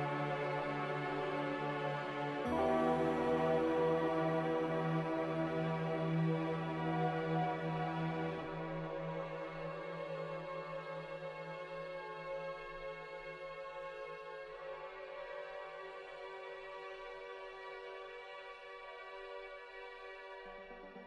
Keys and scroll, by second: 3.1 a, 8.6 Escape, 11.3 Escape, 14.3 ctrl+z, 15.7 z, 17.5 5, 17.7 Return, 20.5 5.